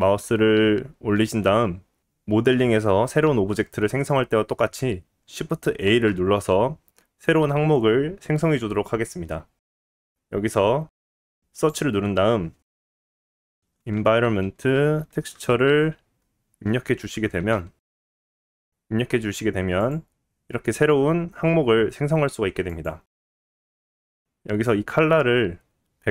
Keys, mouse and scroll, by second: 5.8 shift+a, 24.6-26.1 drag.